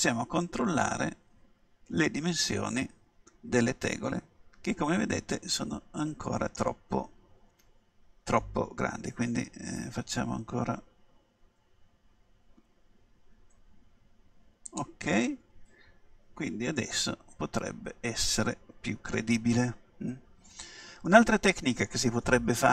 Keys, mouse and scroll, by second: 1.3 middle click, 4.2 middle click, 9.2 s, 14.8-16.7 drag, 16.8-18.7 middle drag, 20.3-22.1 middle drag.